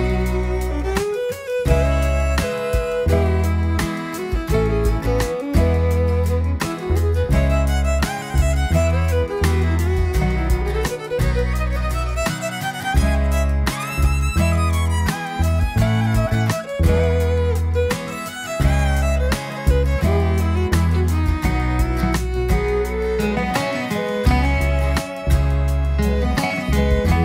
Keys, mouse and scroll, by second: 0.2 shift+d, 1.0 x, 1.7 click, 6.0 click, 7.3 click, 8.9-14.5 drag, 15.2 click, 16.9-19.5 drag, 21.2-25.5 drag, 25.7 scroll down 1, 26.0-27.2 middle drag.